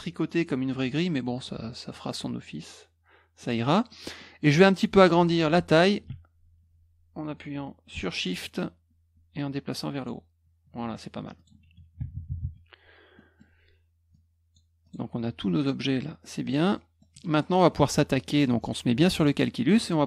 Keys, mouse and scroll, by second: 3.4 click, 3.9 middle click, 8.6 shift+click, 10.3-11.3 shift+scroll down 2, 11.3 click, 13.1 middle click, 14.1-14.5 drag, 14.8 click, 15.5-16.2 drag, 16.4 click, 16.7 middle click, 17.2 middle click, 19.1 click.